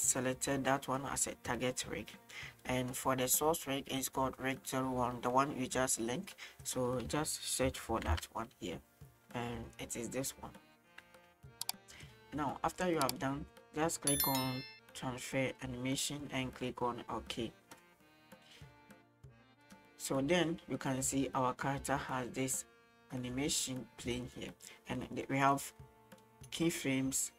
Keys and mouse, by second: 2.9-6.7 right drag, 6.7-10.4 drag, 11.5-12.1 shift+middle drag, 15.5-17.8 drag, 19.7 right click, 20.5-24.3 drag, 25.4 middle click.